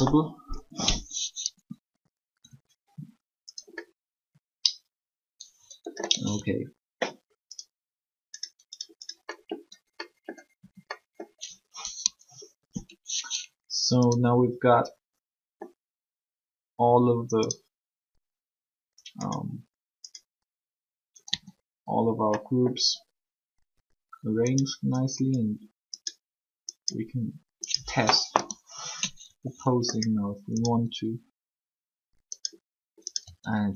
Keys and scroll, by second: 6.0 r, 10.6 a, 21.3 a, 28.3 3, 33.2 r.